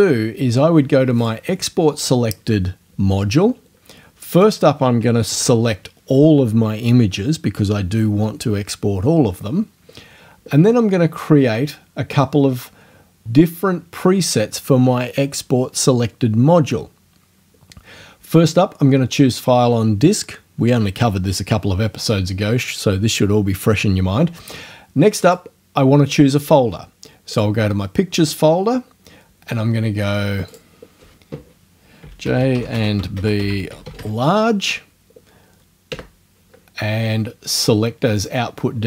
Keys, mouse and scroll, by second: 1.2 click, 4.3 click, 5.3 ctrl+a, 25.3 click, 27.3 click, 30.5 click, 31.8-34.5 typing, 35.9 KP_Enter, 38.2 click.